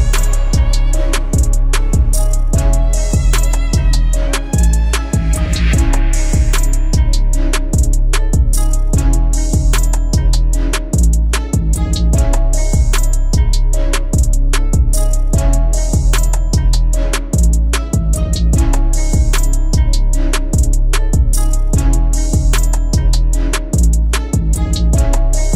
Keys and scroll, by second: 2.8 ctrl+z, 22.7 ctrl+d.